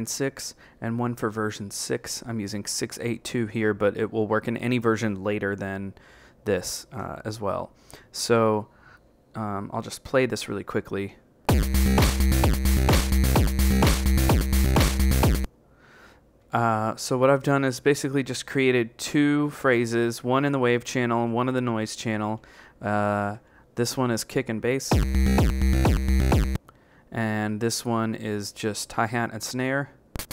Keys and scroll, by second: 16.3 Right, 20.7 Right, 21.8 Left, 22.2 Left, 22.7 Right, 23.3 Right, 27.1 b, 27.4 Right.